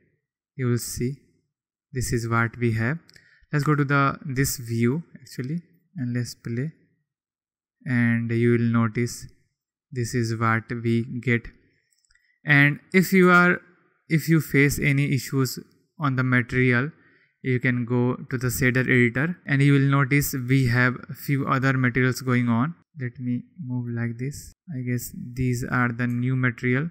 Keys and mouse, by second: 2.6-3.0 drag, 3.5 KP_3, 4.5 click, 6.2 click, 9.6 click, 15.4 click, 17.7 drag, 21.3 click, 22.5 click, 24.6 shift+click, 25.5 shift+click, 26.5 shift+click.